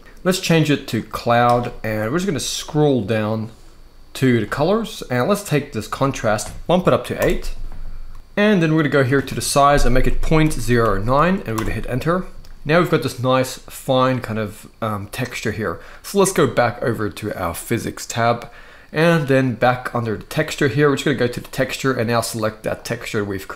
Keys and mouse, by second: 0.0-0.8 drag, 4.0 click, 5.9-6.9 drag, 8.8-11.3 drag, 17.8 click, 21.1-22.8 drag.